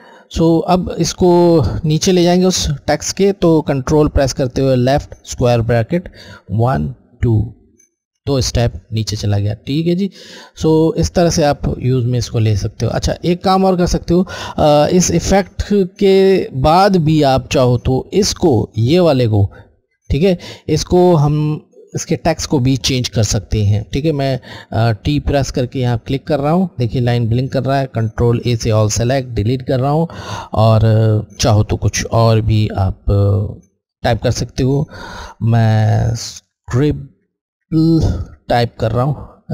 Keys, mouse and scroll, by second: 4.1 alt+Left, 6.4 ctrl+alt+[, 6.8 ctrl+alt+[, 9.9 click, 10.0 alt+Left, 10.6 alt+Left, 11.8 alt+Left, 25.1 t, 25.8 alt+Left, 27.8 ctrl+alt+a, 29.2 Delete, 35.3 alt+s, 35.9 alt+c, 36.5 alt+r, 37.3 alt+i, 37.5 b, 38.3 l, 38.6 alt+e.